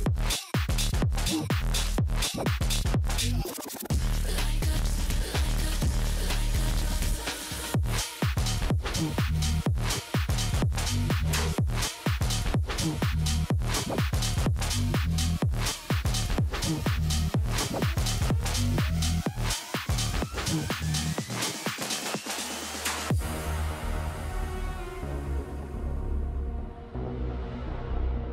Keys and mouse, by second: 0.3 click, 1.5 click, 2.0 click, 2.5 click, 3.3 click, 4.0 click, 4.9 click, 5.2 click, 7.6 click, 8.4 click, 9.2 click, 10.8 click, 11.5 ctrl+z, 14.5 click, 15.0 click, 15.3 click, 16.4 click, 17.3 click, 18.1 space, 19.7 click, 21.2 space, 21.4 click, 23.0 Return, 23.6 click, 25.5 click, 26.0 shift+click, 26.4 click.